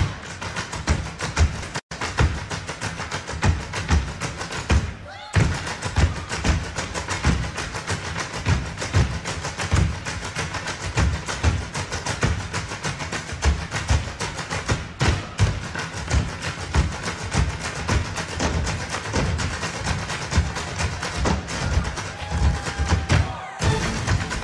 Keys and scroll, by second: 16.4 super+j.